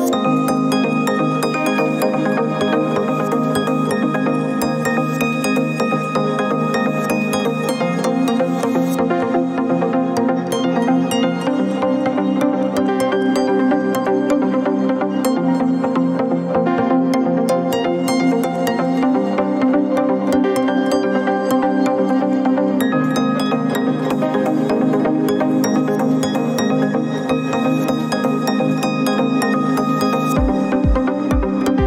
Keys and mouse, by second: 1.7-3.5 middle drag, 3.8 click, 7.3 click, 7.9-8.6 middle drag, 9.5-13.9 middle drag, 15.5-15.9 shift+middle drag, 16.6-17.4 middle drag, 21.4-22.3 middle drag, 24.6 click, 27.4 shift+click, 29.5-30.3 middle drag, 30.8 click.